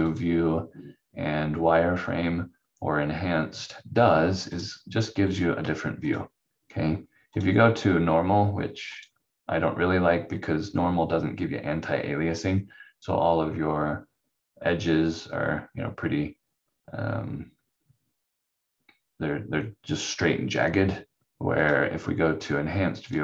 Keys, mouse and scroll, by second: 0.1 click, 4.5 click, 11.7-13.1 scroll up 1, 13.3-13.9 scroll down 1, 16.9-17.4 scroll down 1, 21.6 click.